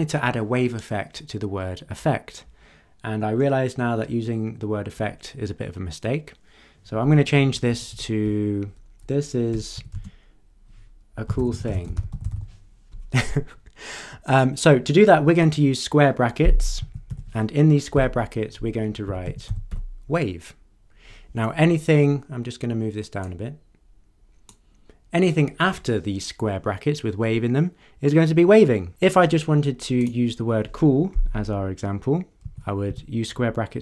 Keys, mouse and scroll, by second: 7.1 Delete, 9.5 BackSpace, 9.9 space, 11.0-12.8 typing, 14.2 click, 16.8 [, 17.1 ], 17.9 Left, 18.8-20.2 typing, 23.2-24.7 drag, 30.0 click, 32.4 [, 32.8 ].